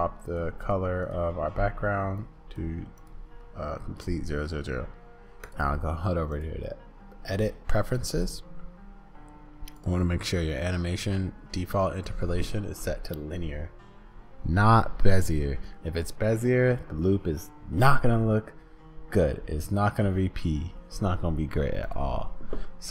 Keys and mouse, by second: 5.4-6.9 drag.